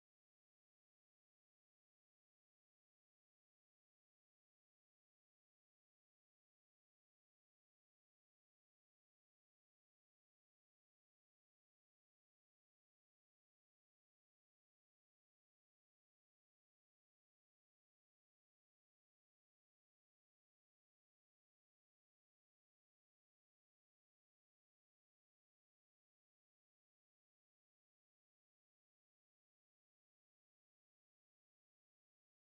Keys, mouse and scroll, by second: 1.1 middle click, 1.6 click, 2.1 ctrl+z, 2.6 click, 3.0 click, 3.7 middle click, 4.0 middle click, 4.3 click, 4.5 click, 4.8 middle click, 5.2 KP_1, 5.5 s, 6.2 click, 6.4 middle click, 6.8 click, 7.1 scroll up 5, 7.5 s, 7.9 middle click, 8.9 click, 9.3 click, 9.5 click, 9.7 middle click, 10.2 5, 10.9 middle click, 11.1 s, 11.5 middle click, 11.6 scroll down 2, 12.4 click, 14.0 click, 15.1 click, 16.4 click, 16.9 click, 17.9 click, 18.4 click, 18.9 click, 19.2 click, 19.6 click, 19.8 click, 20.0 click, 20.3 click, 21.3 middle click, 21.5 middle click, 21.8 middle click, 22.1 s, 22.7 KP_7, 23.0 g, 23.5 KP_1, 24.6 s, 25.2 middle click, 25.5 middle click, 26.0 click, 29.2 click, 29.7 click, 30.6 KP_1, 31.1 s, 31.9 click, 32.1 click.